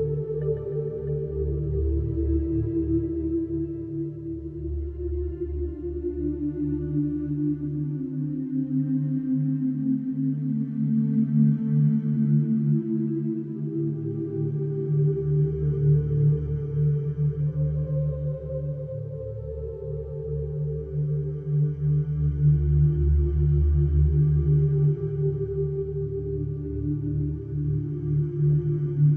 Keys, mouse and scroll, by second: 1.0 middle click, 1.9 click, 4.3 middle click, 5.8-6.7 scroll, 6.7 click, 8.2-8.5 scroll, 9.0-9.8 scroll, 10.3-11.3 scroll, 11.3-12.1 scroll, 12.1-13.1 scroll, 14.7 click, 15.9 click, 19.3 click, 22.3 click, 23.5 click, 24.5-25.4 scroll, 26.1 click, 26.5-26.8 scroll, 27.7 middle click, 28.4-28.7 scroll.